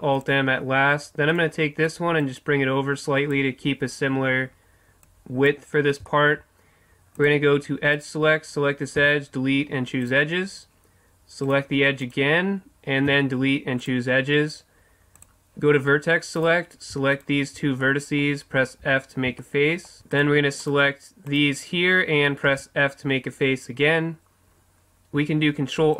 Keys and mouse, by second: 1.3-3.3 right drag, 2.2-5.9 drag, 5.9-7.9 middle drag, 9.0 Delete, 13.1 Delete, 15.2-16.5 drag, 17.8-18.8 right drag, 18.0 middle click, 18.8 f, 19.0 middle click, 19.4 middle click, 20.1-23.9 right drag, 22.5 f, 25.4 ctrl+r.